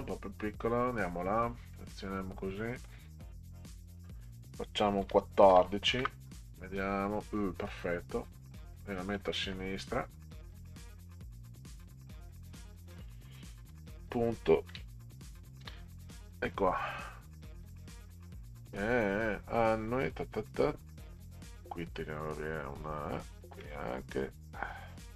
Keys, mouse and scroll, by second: 1.5-2.8 drag, 3.7 click, 5.0 1, 5.5 4, 6.0 Return, 8.8 click, 10.6 click, 13.7 ., 14.5 KP_Enter, 15.6 ctrl+v, 18.0 click, 19.0 click, 19.9 Delete, 20.1 Delete, 20.2 Delete, 21.3 click, 21.6 Delete, 23.3 click, 23.5 Delete.